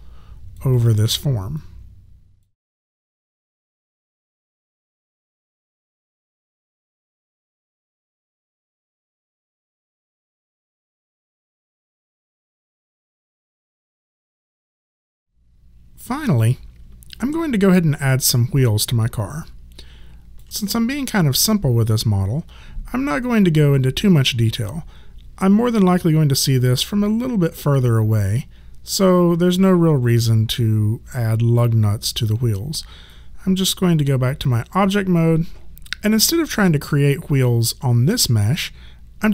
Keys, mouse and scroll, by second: 3.2 alt+right click, 3.3 alt+click, 4.2 alt+click, 4.8 w, 5.2 alt+click, 5.4 alt+middle click, 5.7 right click, 6.1 click, 7.1 click, 8.0 shift+click, 8.4 shift+click, 9.2 click, 9.3 shift+click, 10.0 click, 10.6 click, 17.2 alt+click, 33.1 right click.